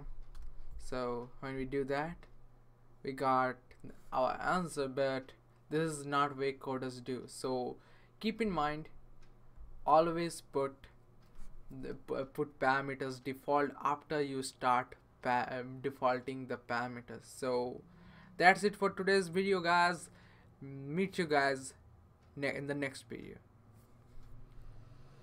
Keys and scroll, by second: 0.0-0.3 typing.